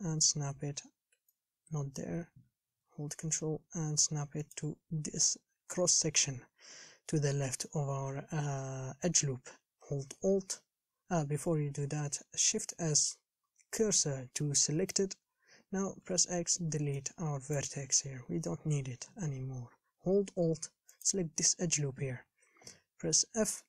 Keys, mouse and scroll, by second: 2.4 g, 15.1 shift+s, 17.8 x, 21.2 alt+click.